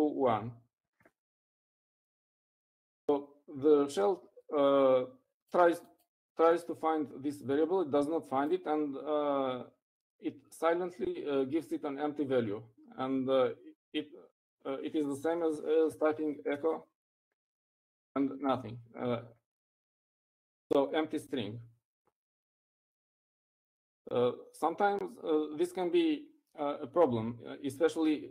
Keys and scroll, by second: 16.2-18.3 typing.